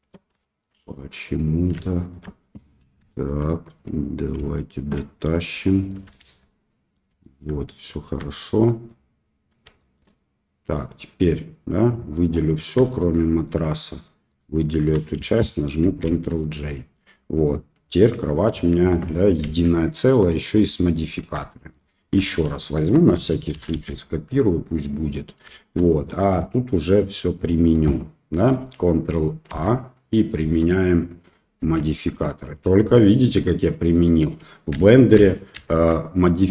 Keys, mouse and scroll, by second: 0.4 shift+click, 1.0 ctrl+click, 1.8 shift+middle click, 3.1 shift+middle click, 3.8-4.8 drag, 5.4 Tab, 5.6 middle click, 6.2 shift+z, 6.4 middle click, 7.2 shift+middle click, 7.6 middle click, 8.2 shift+middle drag, 8.6 middle drag, 9.7 shift+middle click, 10.6 click, 12.1 drag, 12.9 shift+click, 13.4 shift+click, 14.2 shift+click, 15.8 ctrl+j, 16.7 middle drag, 18.2 click, 19.4 ctrl+z, 20.8 middle click, 21.7 shift+click, 22.5 shift+middle click, 23.5 shift+d, 25.5 shift+middle drag, 26.0 click, 26.6 middle drag, 27.2 click, 29.5 ctrl+a, 30.4 ctrl+a, 31.6 ctrl+a, 35.1 ctrl+z, 35.5 ctrl+z.